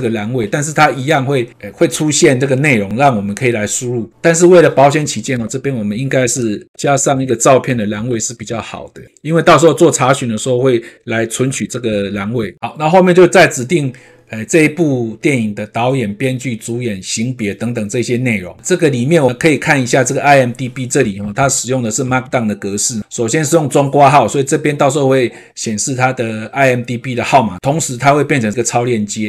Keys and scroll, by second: 6.2 ctrl+space, 6.7 KP_7, 7.1 ctrl+space, 11.5 ctrl+space.